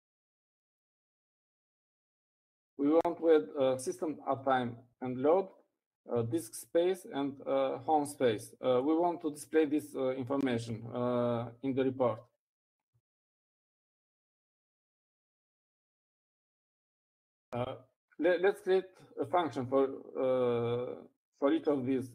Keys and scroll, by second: 3.1-3.6 typing.